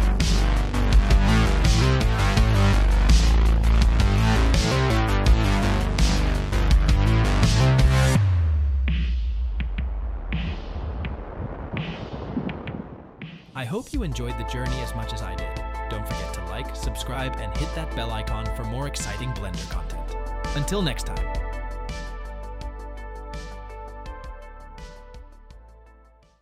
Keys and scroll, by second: 2.2 Tab.